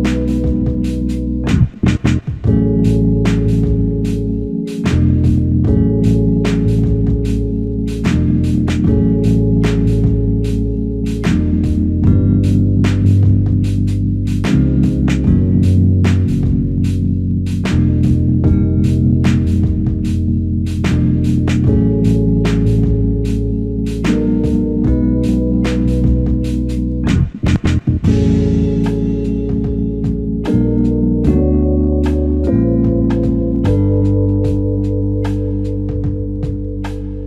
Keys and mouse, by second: 1.8 ctrl+click, 5.6 alt+click, 13.4 ctrl+click, 17.2 q, 18.3 alt+click, 25.1 double click, 29.4 alt+click, 34.5-35.3 typing.